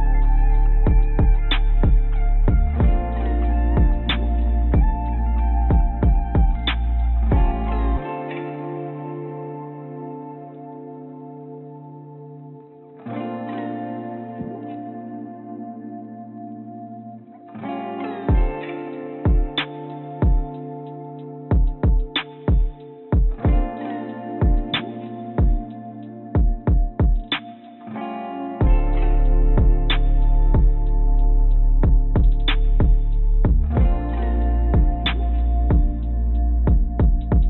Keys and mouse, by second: 5.6 click, 6.2 shift+g, 8.3 s, 11.6 Tab, 12.3-12.8 drag, 13.7 s, 19.2 a, 22.7 s, 24.7 ctrl+z, 25.5 click, 27.2 a, 28.7 s, 31.6 s, 36.0 click.